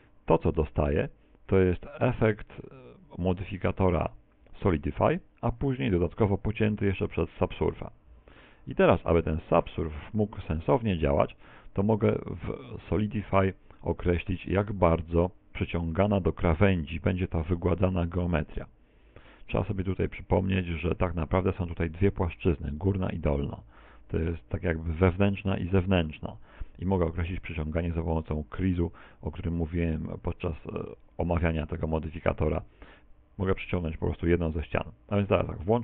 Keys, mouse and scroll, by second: 2.4 middle click, 5.9 ctrl+2, 7.9 middle click, 13.4 Tab, 13.8 middle click, 16.9 click, 21.5 click, 21.8 middle click, 21.9 Tab, 22.3 middle click, 22.7 scroll up 2, 29.4 middle click, 30.2 middle click, 30.9 middle click, 31.6 click.